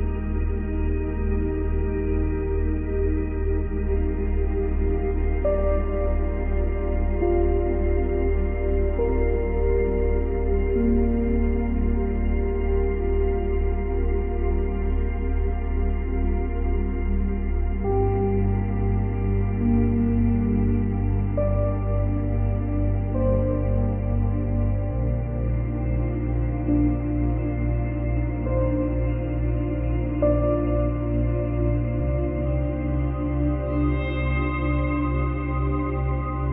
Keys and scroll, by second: 1.5 ctrl+z, 4.8 space, 8.7 space.